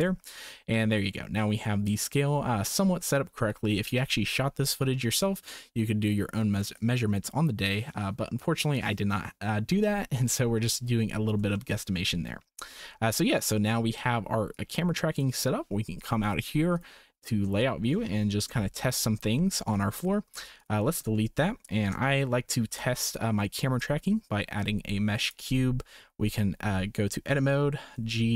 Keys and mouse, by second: 11.6 shift+click, 12.8 shift+click, 14.6 click, 17.6-17.9 shift+drag, 18.4 KP_0, 19.3-19.7 shift+drag, 20.2 x, 21.1 shift+middle drag, 22.6 shift+a, 26.0 Tab, 27.3 a, 27.9 g.